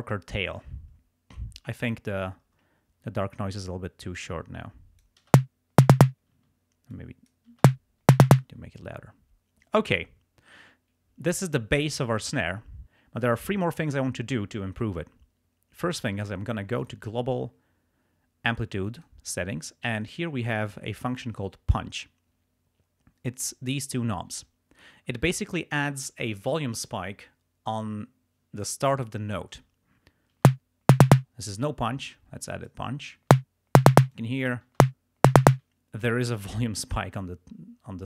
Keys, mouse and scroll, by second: 1.9 click, 4.2-5.3 drag, 5.3 space, 6.4 space, 7.0 click, 7.6 space, 8.5 space, 16.8 click, 19.0 click, 30.5 space, 31.2 space, 31.8-32.9 drag, 33.3 space, 34.0 space, 34.2 click, 34.8 space, 35.5 space.